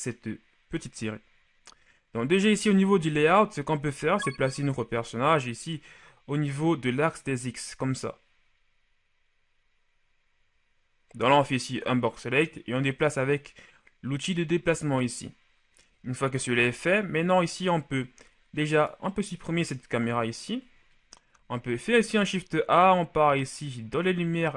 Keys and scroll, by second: 4.4 shift+b, 16.4 shift+a, 19.9 Delete, 21.7 shift+a.